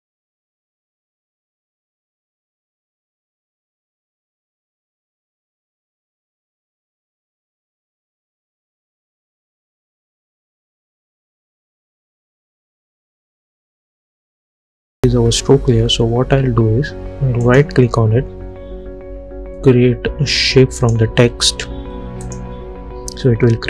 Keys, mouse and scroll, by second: 10.1 click, 13.2 ctrl+d, 14.3 click, 17.5 right click, 20.9 click.